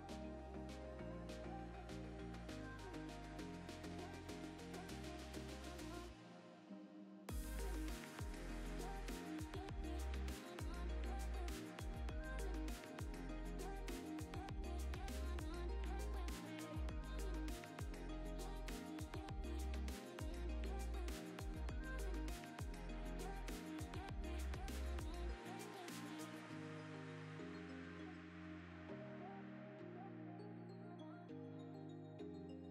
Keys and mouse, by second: 0.5 Tab, 0.8 click, 1.2 KP_1, 1.7 shift+middle click, 1.9 g, 2.3 middle drag, 3.0 shift+click, 3.4 drag, 3.8 shift+middle drag, 4.0 click, 4.1 right click, 4.8 click, 5.0 click, 5.2 click, 6.0 middle click, 7.2 drag, 7.3 g, 7.9 KP_0, 8.3 shift+middle drag, 9.7 ctrl+s, 12.5 shift+right click, 12.8 shift+a, 13.6 Tab, 13.7 1, 13.9 s, 15.1 f, 15.2 e, 16.2 ctrl+r, 16.5 s, 17.7 2, 17.8 alt+click, 17.9 middle click, 18.4 middle click, 18.5 ctrl+b, 20.2 2, 20.4 alt+click, 20.6 shift+middle click, 20.9 Tab, 21.1 ctrl+2, 21.3 Tab, 21.4 3, 21.6 x, 22.0 click, 22.3 shift+click, 22.4 shift+middle click, 22.5 Tab, 23.3-23.9 drag, 24.3 shift+click, 25.3 click, 26.1 right click, 26.6 middle drag, 26.8 Tab, 27.0 2, 27.1 alt+click, 27.4 ctrl+b, 28.7 Tab, 30.3 shift+click, 31.2-32.7 typing, 32.0 Tab.